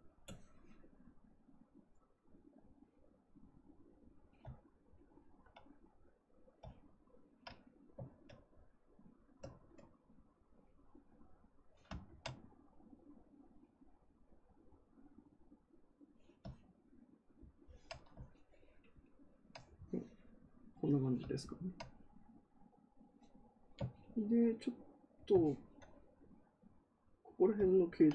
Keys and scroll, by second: 9.4 ctrl+z.